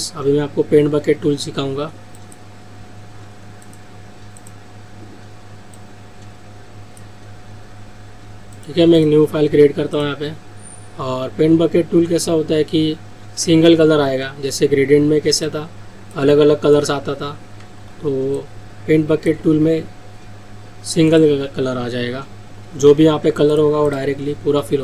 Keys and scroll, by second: 17.8 ctrl+z, 23.0 ctrl+z.